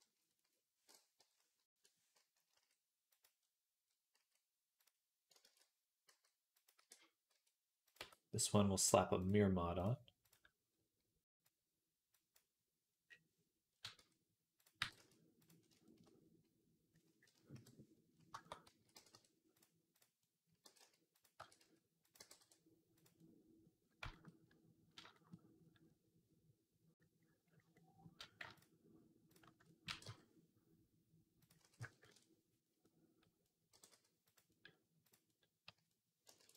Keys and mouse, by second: 2.4 s, 3.2 click, 4.0 s, 5.3 ctrl+z, 5.9 s, 6.6 e, 7.8 Tab, 9.0-12.2 drag, 12.2-14.4 middle drag, 13.8 Tab, 14.4 click, 14.6-15.9 middle drag, 14.6 g, 15.9 click, 16.0-17.4 drag, 17.4-19.8 middle drag, 17.4 KP_3, 18.5 a, 18.8 g, 19.8 click, 19.8-21.2 middle drag, 20.5 g, 21.2 e, 22.0 g, 24.2-28.4 middle drag, 28.4 alt+shift+click, 28.4 alt+shift+middle click, 29.1 alt+shift+click, 29.3-32.7 shift+middle drag, 29.7 e, 31.5 s, 33.6 g, 34.9 click, 35.5 a, 36.1-36.5 ctrl+middle drag, 36.2 ctrl+r.